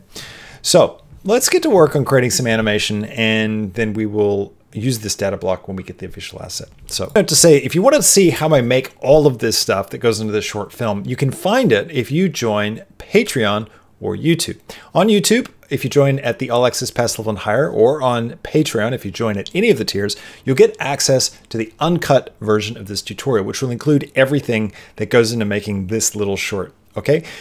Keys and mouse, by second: 6.9 click.